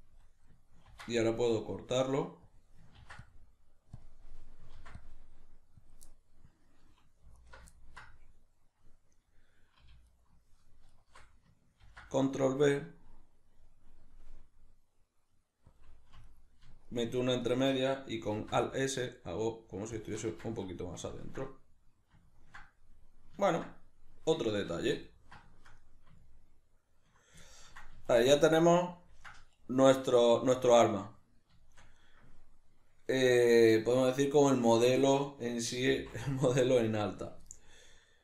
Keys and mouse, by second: 0.9 ctrl+r, 2.6 click, 3.0 ctrl+r, 4.1 click, 4.3-6.0 middle drag, 4.8 ctrl+r, 6.0 click, 6.1-7.4 middle drag, 7.4 alt+right click, 7.8-10.1 ctrl+middle drag, 10.1 alt+shift+right click, 10.9 alt+shift+right click, 11.8 ctrl+b, 15.8 click, 16.2 alt+right click, 16.9 alt+shift+right click, 17.4 alt+shift+right click, 18.4 alt+s, 20.1-21.9 middle drag, 20.1 shift+click, 20.3 Tab, 22.3-38.2 ctrl+middle drag, 28.0 a.